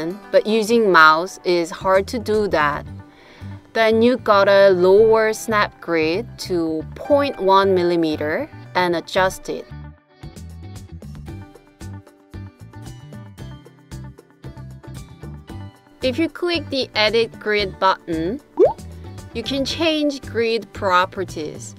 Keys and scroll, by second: 1.8 Right, 2.3 Right, 3.2 Right, 3.4 Right.